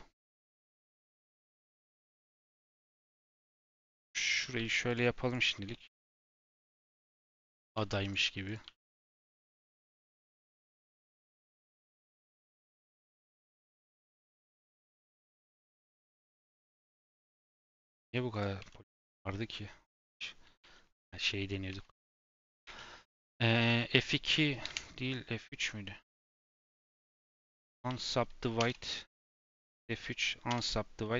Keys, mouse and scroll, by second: 0.2 shift+middle click, 0.9 g, 3.3 click, 3.5 g, 4.3 click, 4.5 g, 5.2 click, 5.4 g, 6.2 click, 6.3 g, 7.1 shift+middle click, 7.5 click, 7.7 g, 8.4 click, 8.6 g, 9.2 click, 9.4 g, 10.0 shift+middle click, 10.4 click, 10.6 g, 11.2 click, 11.3 g, 11.9 click, 12.0 g, 12.7 shift+middle click, 13.0 click, 13.2 g, 14.0 click, 14.2 g, 14.9 click, 15.2 g, 16.5 click, 16.6 g, 17.8 click, 18.0 g, 18.5 Tab, 18.7 scroll down 2, 19.0 middle click, 19.3-20.6 scroll up 5, 19.4 Tab, 19.8 shift+middle click, 20.6 2, 21.2 Tab, 21.6 Tab, 22.3 a, 22.6 2.